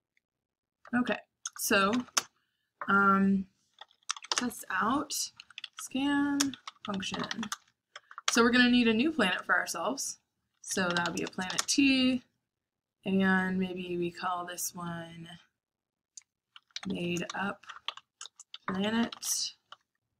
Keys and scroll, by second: 0.0-2.1 typing, 3.5-8.3 typing, 10.2-11.9 typing, 16.2-18.4 typing.